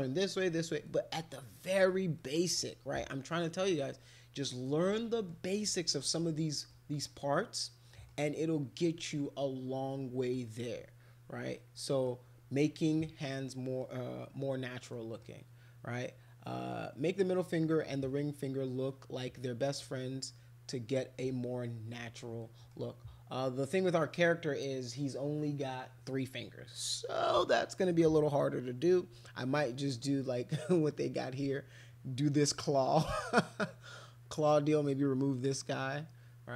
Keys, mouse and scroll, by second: 0.8-1.9 middle drag, 2.2 middle click, 2.9 middle click, 4.6 middle click, 5.7 middle click, 6.7 middle click, 7.7 middle click, 9.2-10.3 middle drag, 11.8 middle click, 12.6 middle click, 13.5 middle click, 14.9 middle click, 19.4 middle click, 22.4 middle click, 23.7 middle click.